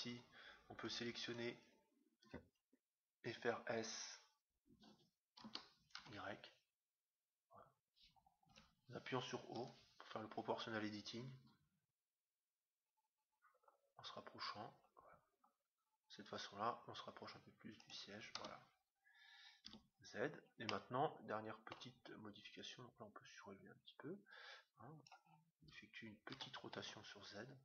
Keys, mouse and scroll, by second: 1.5-2.9 right drag, 5.5 s, 9.5 o, 11.3 s, 18.4 Tab, 19.6 z, 20.6-22.3 middle drag, 22.7-24.5 drag, 26.4 r.